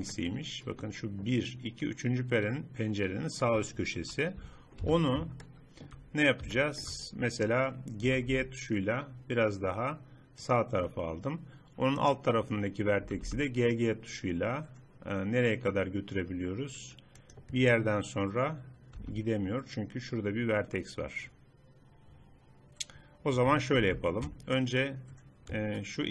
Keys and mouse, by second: 4.1 KP_3, 4.9 z, 8.1 g, 12.1-13.7 drag, 13.1 g, 13.9 middle click, 15.8 middle click, 16.0 middle click, 16.2 middle click, 17.7-19.1 middle drag, 19.1 z, 23.9 ctrl+z.